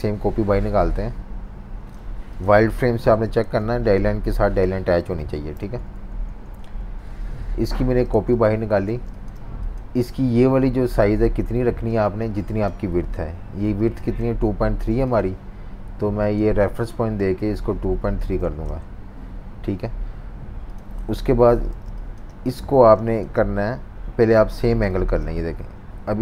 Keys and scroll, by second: 2.7 super+y, 3.4 z, 5.2 super+y, 5.6 -, 6.1 super+-, 8.1 z, 8.9 v, 11.6 v, 17.8-18.9 typing, 21.2 super+-, 21.8 space, 22.8 v, 24.7 typing.